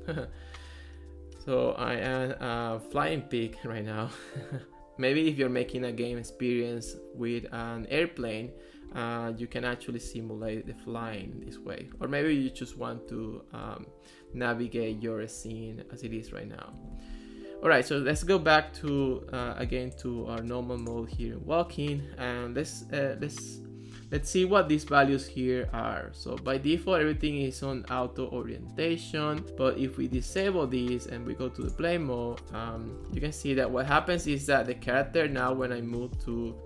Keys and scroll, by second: 0.3 Left, 1.7 Down, 2.1 Up, 2.6 w, 3.0 Left, 4.8 Right, 5.7 w, 6.3 Right, 7.4 Left, 7.8 Down, 8.2 Up, 8.9 Left, 9.6 Up, 10.1 Down, 11.3 Left, 11.5 w, 12.3 Down, 12.7 Up, 13.3 Left, 13.7 w, 15.0 Right, 15.6 Up, 15.8 w, 16.1 Left, 32.6-36.6 typing.